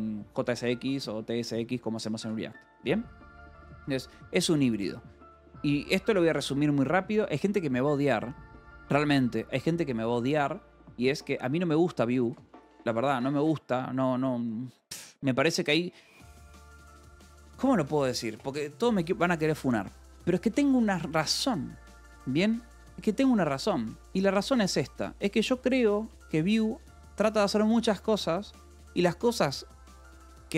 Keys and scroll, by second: 2.6 Escape, 4.3 o, 5.0 BackSpace, 6.0 Return, 12.4 space, 16.8 Escape, 17.6 a, 24.1 Escape, 24.3-26.3 typing.